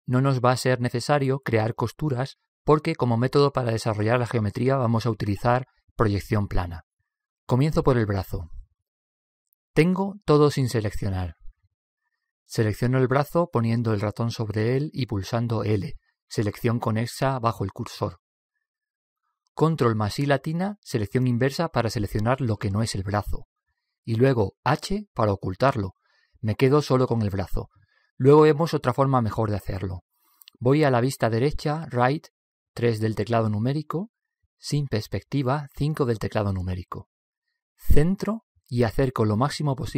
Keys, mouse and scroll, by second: 15.0 l, 16.4 l, 20.4 ctrl+i, 22.3 ctrl+i, 24.5 h, 25.3 h, 33.3 KP_3, 35.6 KP_5, 36.1 KP_5, 38.4 middle click, 39.0-39.9 middle drag.